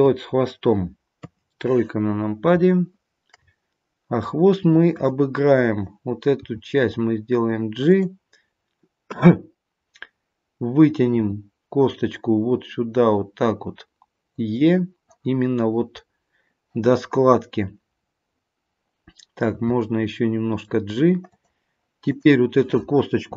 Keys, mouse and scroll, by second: 1.2 KP_3, 2.7 shift+middle click, 4.9 click, 6.4 g, 11.1 e, 16.0-19.0 scroll up 2, 19.5 g, 22.0 click.